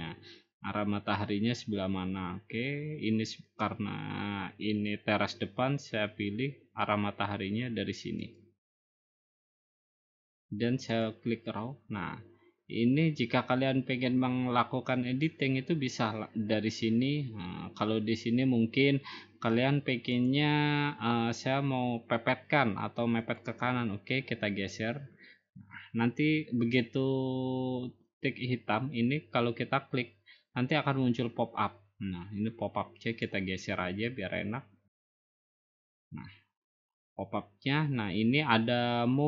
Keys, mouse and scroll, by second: 8.4-9.5 drag, 11.0 click, 11.7 middle click, 12.0 middle click, 12.1 middle click, 12.8 scroll up 3, 12.9 scroll down 1, 14.4-15.0 scroll down 1, 15.0-15.5 scroll up 1, 20.3 click, 23.4-24.6 drag, 34.9-36.1 drag.